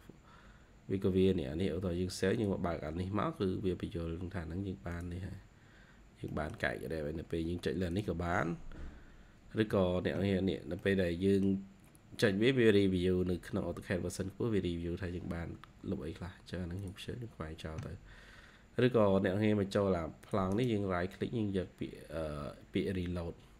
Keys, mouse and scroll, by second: 0.1-0.7 scroll down 1, 3.6-4.2 scroll down 2, 5.8 scroll down 4, 6.2 middle click, 10.7 middle click, 14.2-15.2 scroll down 1, 20.4 right click.